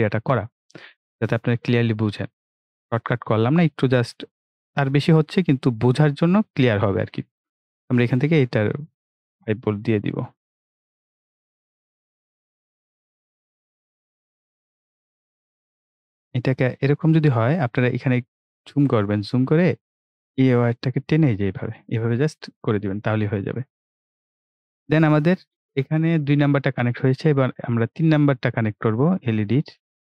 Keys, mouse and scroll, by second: 0.6 scroll down 1, 2.9 click, 11.2 click, 14.6 right click, 16.6-18.2 drag, 18.2-18.6 ctrl+scroll up 1, 19.8 click, 22.3 ctrl+scroll down 1, 24.2 click, 28.3 click.